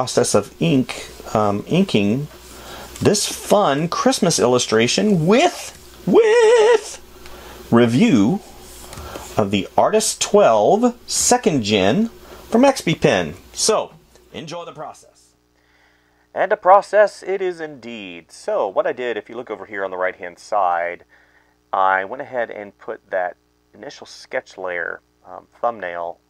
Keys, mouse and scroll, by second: 3.5 space, 16.6 ctrl+z, 16.7 space, 21.6 space, 22.2 space, 22.3 ctrl+z, 22.9 space, 23.3 space, 24.9 space, 25.3 space, 25.9 space.